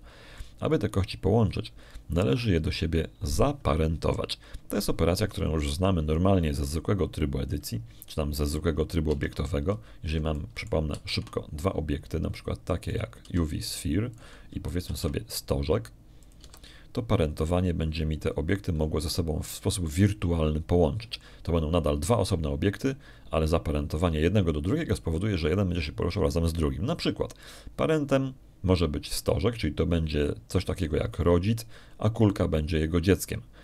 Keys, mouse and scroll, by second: 2.3 click, 9.9 middle click, 10.9 Tab, 11.5 middle click, 12.2 shift+click, 12.8 shift+a, 14.7 click, 15.1 g, 16.0 click, 16.7 shift+a, 18.1 click, 18.3 g, 20.3 click.